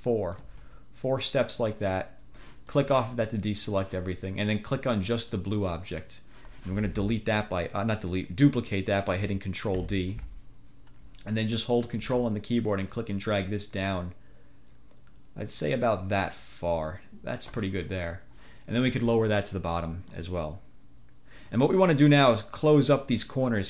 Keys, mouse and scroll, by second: 1.2-1.9 drag, 2.8 click, 5.2 click, 9.8 ctrl+d, 12.8-17.8 drag.